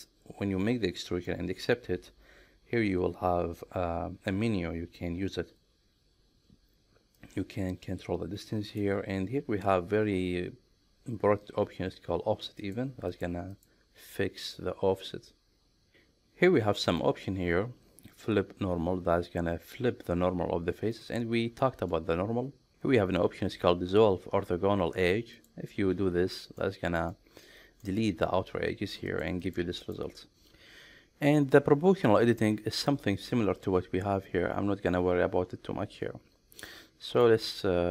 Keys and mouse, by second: 1.3 middle click, 7.4-8.8 drag, 12.7 click, 13.2 click, 13.6 click, 16.8 middle click, 25.4 click, 26.4 middle click, 27.1 middle click, 29.1 click, 29.4 click, 29.8 click, 36.7 middle click.